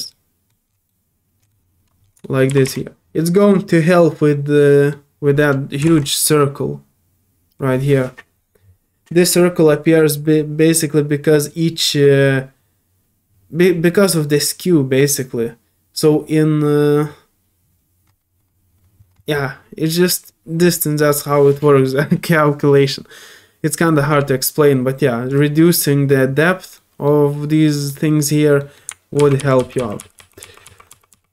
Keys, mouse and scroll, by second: 0.1 middle click, 0.9 middle click, 2.0 scroll down 1, 2.2 shift+middle click, 3.4 scroll down 1, 3.7-4.9 middle drag, 25.3 click, 26.1 middle click, 26.7 middle click, 27.6 middle click, 28.6 middle click.